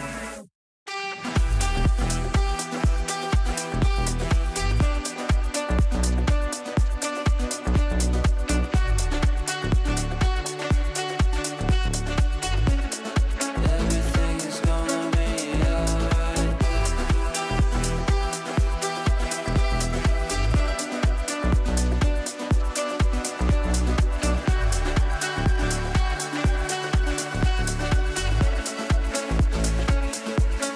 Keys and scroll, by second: 26.1 Delete.